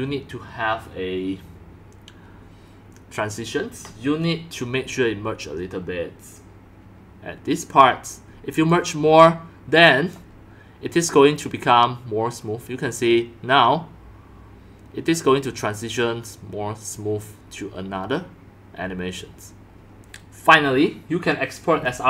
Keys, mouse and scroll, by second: 2.1 click, 2.3-3.7 drag, 5.6 drag, 7.0 drag, 7.4 drag, 8.7-9.0 drag, 9.8-10.1 drag, 11.4 click, 16.0-16.6 drag, 20.0-22.0 drag.